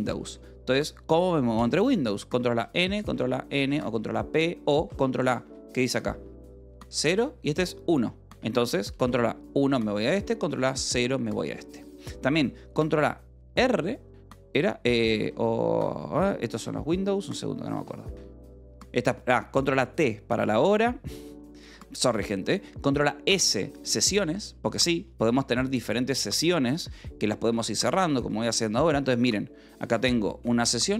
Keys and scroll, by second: 2.5 n, 3.0 n, 3.8 p, 4.8 a, 8.3 Escape, 9.3 1, 10.6 ctrl+a, 10.8 0, 13.4 ctrl+a, 13.4 r, 15.2 w, 16.1 Escape, 17.1 ctrl+a, 17.2 r, 18.0 t, 20.4 Escape, 21.6 s, 23.3-25.4 typing, 26.6-29.0 typing.